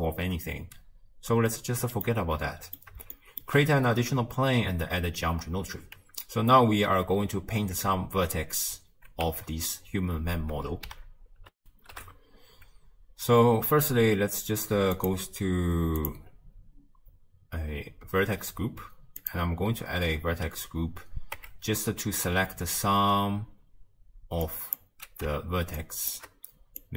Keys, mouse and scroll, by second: 0.8-2.1 scroll up 1, 2.1-7.8 middle drag, 7.8 Tab, 9.3 Tab, 19.3-21.4 drag, 21.4 Tab, 21.8-22.7 scroll up 2, 24.8 click, 26.1 shift+click.